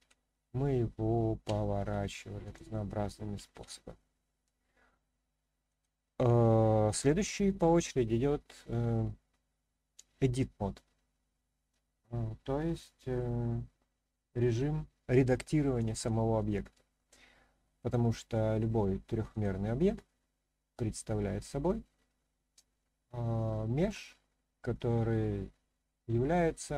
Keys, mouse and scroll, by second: 0.0 ctrl+z, 1.4 r, 2.4 click, 3.5 ctrl+z, 5.7-16.0 drag, 19.3 click, 21.1-22.3 scroll up 1, 22.8-23.8 shift+middle drag, 26.2-26.7 middle drag.